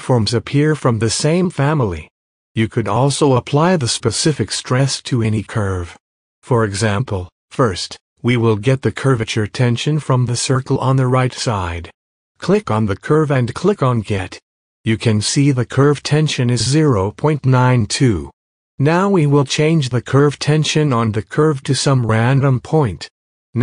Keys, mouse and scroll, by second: 0.7 click, 14.6 click, 17.3-22.1 drag, 22.5 click, 23.3 click.